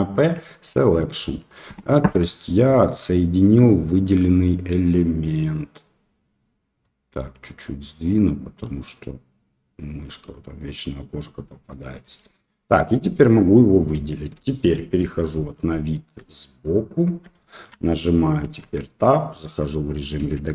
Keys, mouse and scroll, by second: 5.0-6.8 drag, 8.8-11.5 drag, 12.0 Tab, 12.7 click, 13.9 KP_1, 14.4 KP_3, 15.8-16.1 shift+middle drag, 17.4 shift+middle drag, 18.6 Tab, 20.2 a.